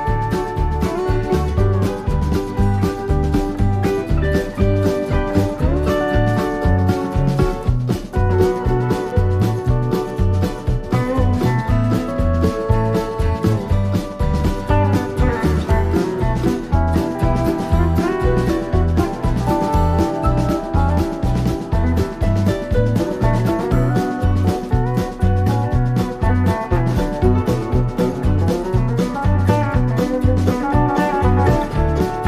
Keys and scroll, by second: 5.1 super+-, 5.5 super+=, 15.5 i, 19.6 super+=, 27.7 i, 31.2 super+-.